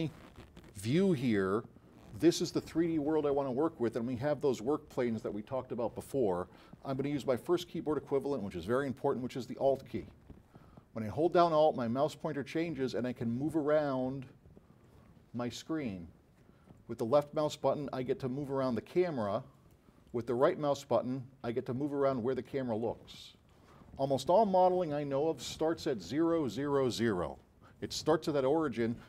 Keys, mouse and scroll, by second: 13.1 alt+click, 15.1 alt+click, 17.1 alt+click, 17.6-19.9 alt+drag, 20.6 alt+right click, 23.5 alt+right click.